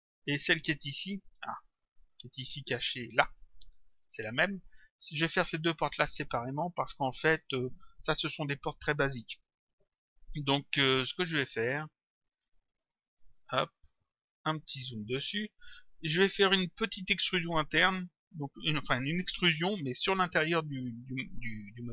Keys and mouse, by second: 2.2 click, 3.8 shift+click, 5.8 click, 13.3 click.